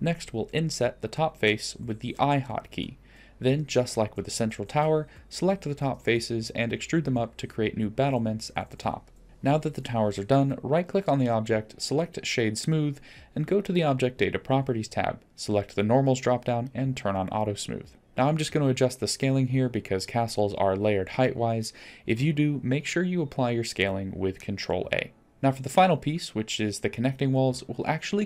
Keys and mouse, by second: 0.4 shift+middle drag, 1.2 s, 2.7 3, 4.9 shift+click, 5.9 shift+click, 7.4 shift+click, 8.3 middle click, 8.3 click, 8.6 shift+click, 9.2 e, 9.3 Tab, 9.9-10.9 shift+drag, 11.2-12.3 middle drag, 12.3 right click, 14.2 click, 16.6 click, 18.0 click, 18.7-19.3 middle drag, 19.7 click, 20.3-20.7 middle drag, 21.3 s, 23.1-23.6 middle drag, 23.6-24.9 drag, 25.2 click, 26.0 s.